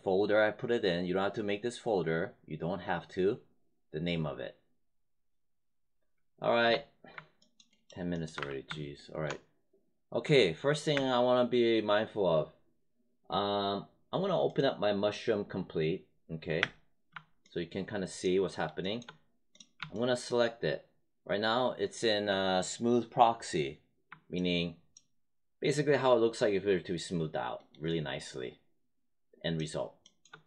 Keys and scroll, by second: 6.6 space, 8.3 w, 10.8 space, 16.5 space.